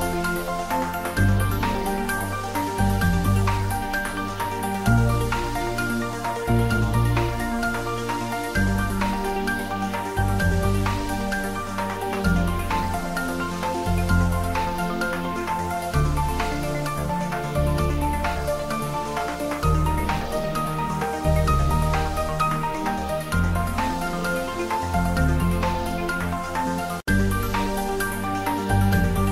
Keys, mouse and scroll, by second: 0.7 click, 2.6 Tab, 3.7 ctrl+r, 4.0 click, 4.9 Tab, 5.3-5.9 ctrl+middle drag, 6.0-6.4 shift+middle drag, 6.5-7.1 ctrl+middle drag, 7.1 Tab, 9.8 shift+click, 10.3-12.7 middle drag, 12.5-15.3 typing, 13.6 Down, 15.5 Down, 16.2 Left, 17.1 Up, 18.5 Return, 18.8-20.3 typing, 22.6 Return, 22.8 ctrl+s, 23.7-26.7 middle drag, 26.7 click, 27.4-28.3 typing.